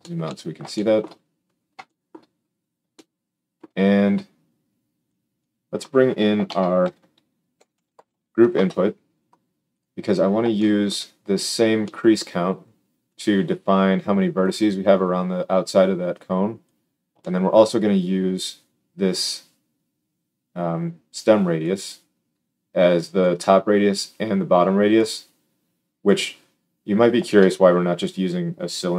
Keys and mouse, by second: 5.8-13.0 drag, 6.4 shift+a.